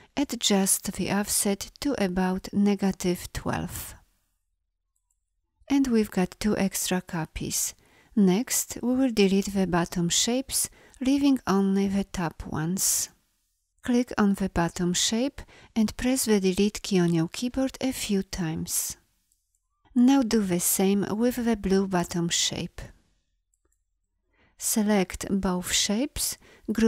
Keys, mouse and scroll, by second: 13.1 a, 24.5 v.